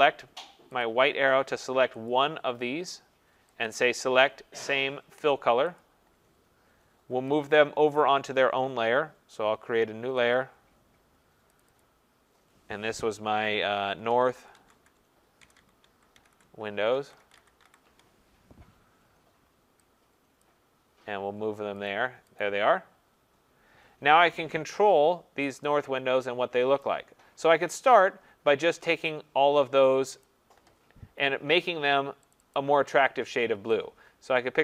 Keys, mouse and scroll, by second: 7.5 click, 10.3 click, 11.6 click, 11.8 click, 13.9-18.1 typing, 20.5 click, 21.9 click, 22.4 click, 26.8 click, 28.4 click, 30.2 click, 32.3 click, 32.6 click.